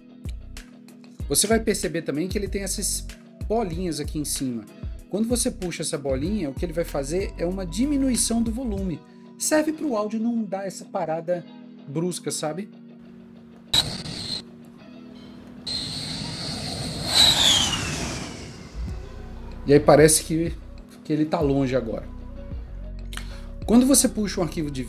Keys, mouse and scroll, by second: 22.8 double click.